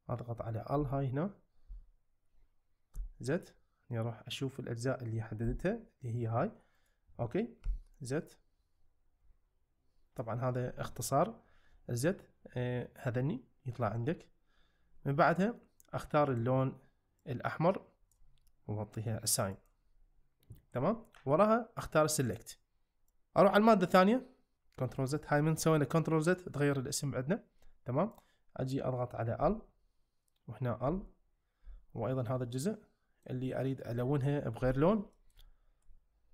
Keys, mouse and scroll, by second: 0.7 l, 1.7 l, 2.9 z, 5.5 g, 6.7 right click, 7.6 z, 19.6 click, 22.2 click, 28.1 click, 29.4 l, 30.9 l, 31.7 l, 32.3 middle click, 34.6 l, 35.2 middle click, 35.4 `.